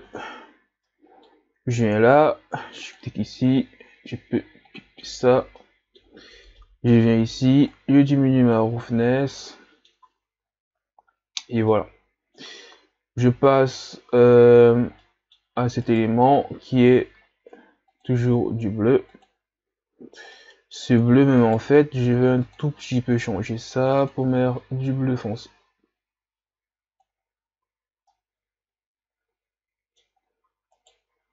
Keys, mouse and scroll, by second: 4.7 click, 5.8-7.9 middle drag, 7.9-9.0 drag, 9.0-9.5 scroll up 3, 9.5-10.0 middle drag, 10.0 a, 10.6-11.8 scroll down 2, 11.8-12.8 middle drag, 12.8-15.1 scroll up 1, 15.1-15.9 middle drag, 15.9 right click, 18.2-20.1 drag, 20.1-20.6 scroll down 3, 20.6 middle click, 21.4 right click, 24.0 click, 27.6 a, 28.1-30.3 middle drag, 30.3-30.9 scroll up 2, 30.9 right click.